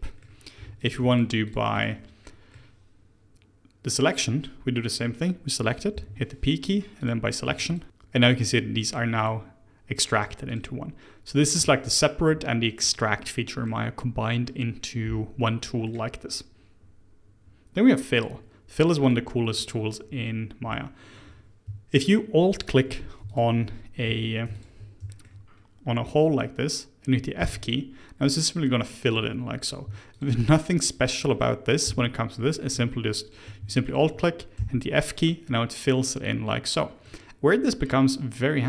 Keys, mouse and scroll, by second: 0.2-0.5 scroll up 1, 0.5 3, 0.7 click, 1.0 shift+click, 1.4 shift+click, 1.7 shift+click, 2.1-5.3 middle drag, 5.9 p, 7.4 Tab, 7.6 click, 8.8 click, 9.1 click, 10.0 click, 10.4 click, 12.9-17.4 middle drag, 17.8 click, 18.1 click, 18.7-19.0 middle drag, 19.0 click, 19.5 Tab, 20.2-22.5 middle drag, 22.5 alt+click, 23.3 alt+click, 24.0 2, 24.5 alt+click, 25.1 shift+middle click, 25.4-27.4 scroll up 1, 27.4 f, 28.2 middle click, 29.1 click, 30.1 alt+click, 31.1 middle click, 31.8 f, 32.3-33.8 middle drag, 33.8 alt+click, 34.5 f, 35.4-38.6 middle drag.